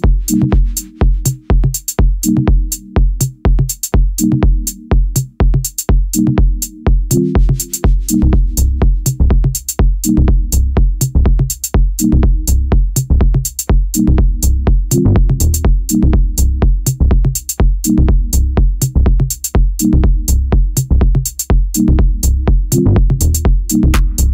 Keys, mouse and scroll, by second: 0.0 click, 0.3 e, 0.7 s, 2.4-2.8 scroll up 3, 2.8 e, 4.2 e, 4.4 s, 5.8 e, 7.0-10.0 middle drag, 10.1 ctrl+KP_Add, 11.1 alt+middle click, 11.1-11.9 scroll up 1, 11.9 ctrl+KP_Add, 13.1 g, 15.2 z, 15.5 click, 16.0 click, 16.7 g, 17.6 z, 17.8-19.1 scroll down 11, 17.9 middle click, 19.1 Tab, 19.3-20.0 scroll up 8, 20.0-20.5 shift+middle drag, 20.5 Tab, 20.8-22.4 shift+middle drag, 22.4 1, 22.5 click, 23.3 shift+click, 23.8 middle click.